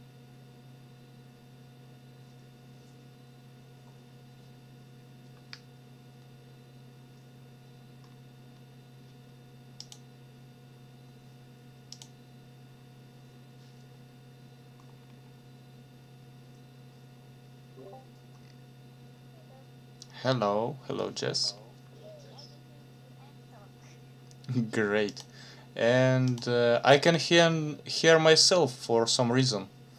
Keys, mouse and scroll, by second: 9.8 click, 11.9 click, 14.9-15.2 scroll down 2, 21.4 scroll up 2, 25.1 click, 26.3 click, 26.9 click.